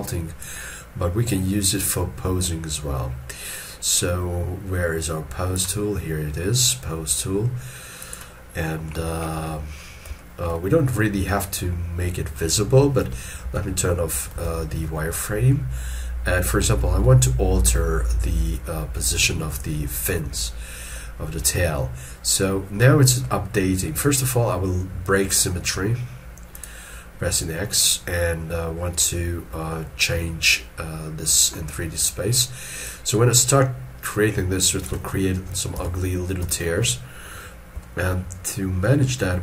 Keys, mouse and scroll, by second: 8.8 middle click, 10.0 scroll down 1, 10.1 shift+middle click, 13.3 middle click, 13.4 alt+e, 14.3 alt+e, 14.8 alt+e, 19.5 ctrl+middle click, 23.0 middle click, 29.8 middle click, 35.8 ctrl+z, 36.5 shift+middle click, 37.8 shift+middle click, 38.1 shift+scroll down 1.